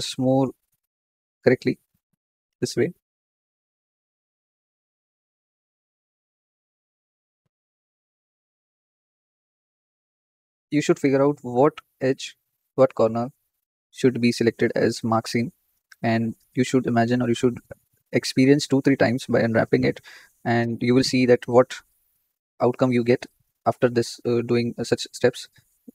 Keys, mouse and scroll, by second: 1.0 shift+click, 2.0 shift+click, 2.3 shift+middle click, 2.9 scroll down 5, 3.2-4.4 shift+middle drag, 4.4 shift+click, 5.4 shift+click, 5.6-6.8 shift+middle drag, 6.8 shift+click, 7.9 shift+click, 8.0 shift+middle click, 9.0 shift+click, 9.8 shift+click, 10.0-11.1 shift+middle drag, 11.1 shift+click, 12.1 shift+click, 12.3-13.5 shift+middle drag, 13.5 shift+click, 14.5 shift+click, 14.7-15.9 shift+middle drag, 16.1-17.1 shift+middle drag, 17.1 shift+click, 18.1 shift+click, 18.5-19.9 shift+middle drag, 19.9 shift+click, 20.7 shift+click, 21.0-22.2 shift+middle drag, 22.2 shift+click, 22.5-24.9 shift+middle drag, 24.9 shift+click.